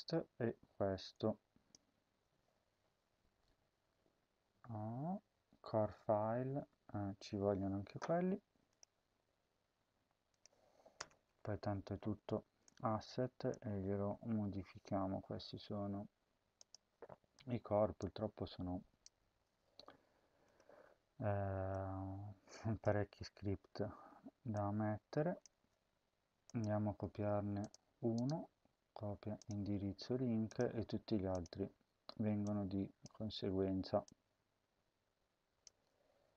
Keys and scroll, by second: 1.9 ctrl+c, 10.8 Return, 11.1 ctrl+v, 13.5 shift+Tab, 19.1 ctrl+c, 22.9 ctrl+v, 25.4 shift+Tab, 35.5 ctrl+v.